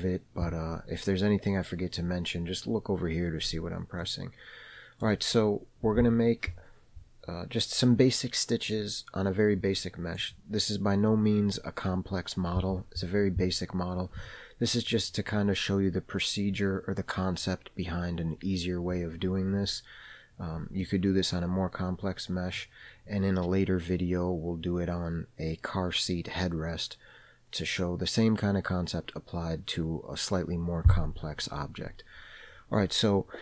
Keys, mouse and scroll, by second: 4.4-5.5 middle drag, 10.6 click, 14.7 middle click, 21.2-23.0 middle drag.